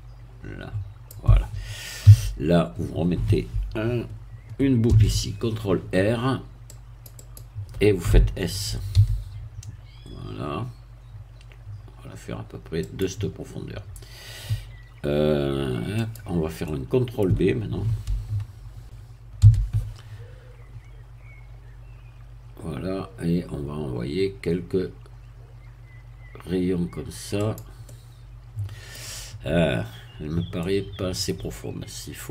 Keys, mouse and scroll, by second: 2.0 a, 4.9 ctrl+r, 6.7 click, 9.0 s, 12.8-15.2 drag, 16.0 click, 16.6-17.7 middle drag, 19.4 ctrl+b, 23.0-23.6 scroll up 2, 23.7 scroll up 2, 27.4 click, 27.8-29.1 middle drag, 30.6 middle click.